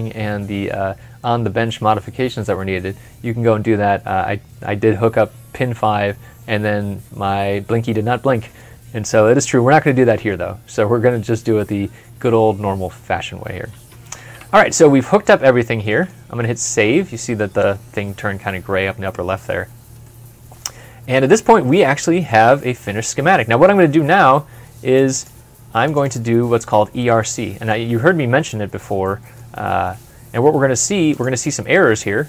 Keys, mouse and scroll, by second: 13.7 ctrl+F12, 14.9 middle click, 16.1 middle click, 16.2 ctrl+s, 19.9 middle click, 20.6 scroll up 1, 21.0-21.4 scroll down 1, 21.6 middle click, 24.9 middle click, 25.3 double click, 27.0 middle click.